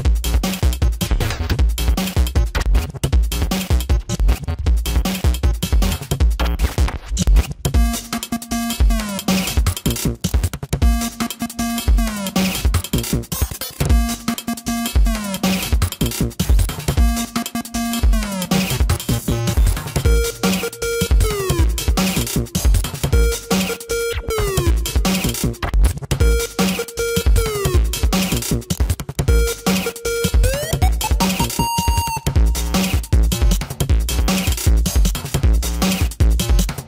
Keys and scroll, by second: 0.4 space, 3.6 space, 6.1 space, 10.4 space, 10.8 space, 16.1 ctrl+-, 16.4 space, 16.6 ctrl+-, 16.8 ], 17.5 ], 18.6 ], 19.1 ], 20.6 ], 21.0 ], 22.8 space, 25.1 space, 26.1 ctrl+-, 26.6 ctrl+-, 27.2 ctrl+-, 27.4 space, 27.8 ctrl+-, 28.1 ], 31.4 space, 33.1 ], 33.8 ], 35.2 ], 35.7 space.